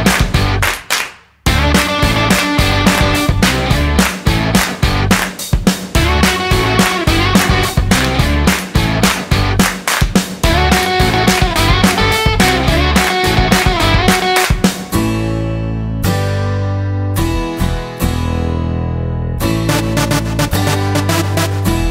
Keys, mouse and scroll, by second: 7.6 click, 10.0 z, 15.3 click, 19.1 click.